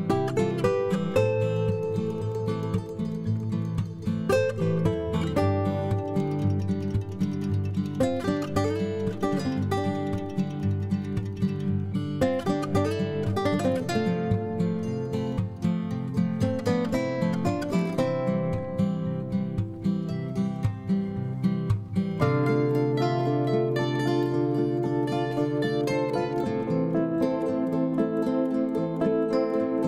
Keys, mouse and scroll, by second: 0.0 m, 10.1 F2, 24.3-24.8 typing.